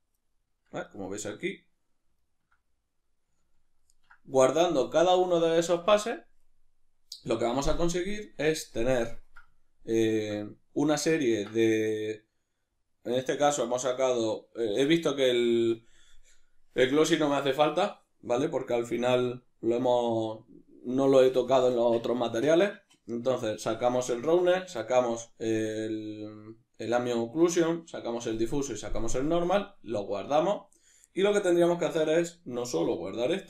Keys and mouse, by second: 0.9-33.4 ctrl+middle drag.